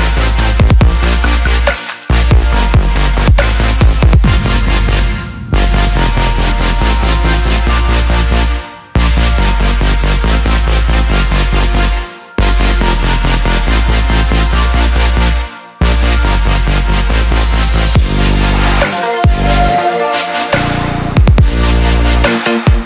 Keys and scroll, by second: 14.4 ctrl+j.